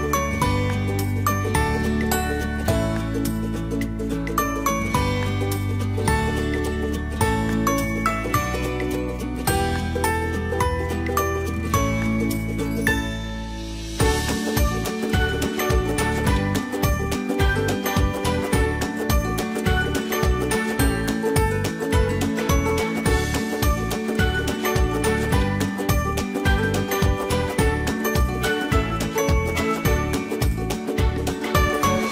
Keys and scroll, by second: 31.3 ctrl+g.